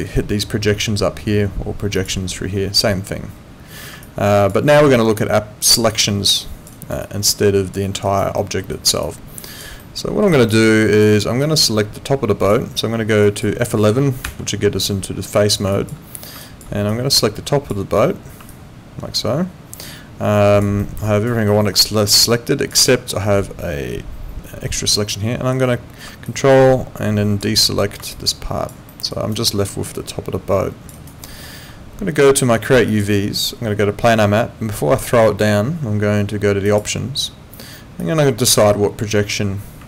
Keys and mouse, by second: 2.0 click, 4.0 alt+click, 4.9 alt+click, 6.7 alt+right click, 7.0 alt+click, 8.1 alt+right click, 8.4 alt+middle click, 8.7 alt+right click, 9.0 alt+click, 9.8 alt+middle click, 10.3 alt+right click, 10.6 alt+click, 13.2 alt+click, 14.2 F11, 15.7 alt+click, 16.4 alt+click, 18.5 alt+click, 20.8 alt+middle click, 21.0 alt+right click, 21.5 alt+middle click, 21.8 alt+click, 22.9 alt+middle click, 26.3 ctrl+click, 28.1 alt+click, 28.9 alt+middle click, 29.1 alt+right click, 29.5 alt+click, 30.9 alt+right click, 31.2 alt+middle click, 32.9 click, 36.6 click, 38.0 click.